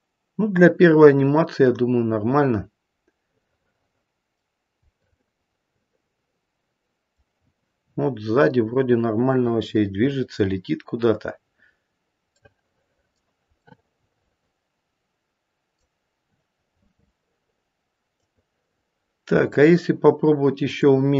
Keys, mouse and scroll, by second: 3.4 middle click, 4.9 middle click, 11.7-12.0 scroll down 2, 12.4 middle click, 12.8 middle click, 13.7 middle click, 14.7 middle click, 16.6-17.5 scroll down 3, 18.1 click, 20.6 click.